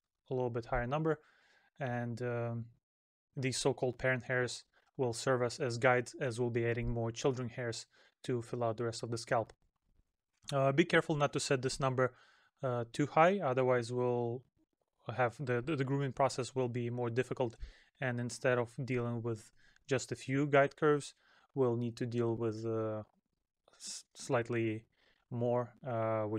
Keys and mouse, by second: 8.2 middle click, 21.1 middle click, 22.3 middle click.